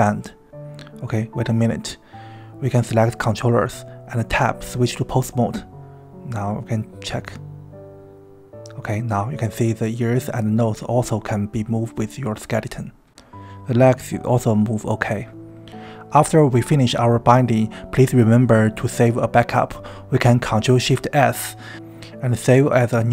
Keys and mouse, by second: 0.8 click, 1.4 click, 3.3 click, 4.0 Tab, 5.5 g, 7.7 click, 8.1 r, 9.2 right click, 11.0 right click, 12.1 KP_3, 12.7 g, 15.8 KP_1, 21.7 ctrl+shift+s.